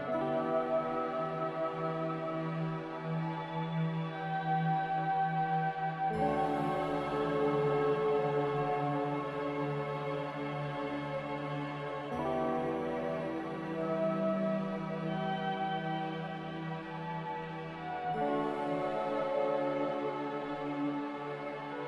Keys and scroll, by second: 12.2 a.